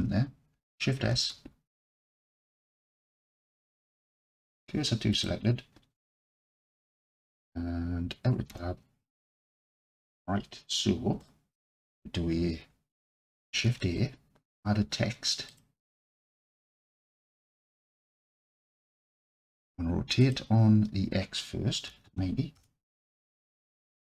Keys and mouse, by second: 1.1 shift+s, 8.5 Tab, 11.2 alt+click, 13.6 shift+a, 16.7-17.4 alt+drag, 18.5-18.9 middle drag, 20.2-23.3 drag, 24.0-24.1 alt+drag.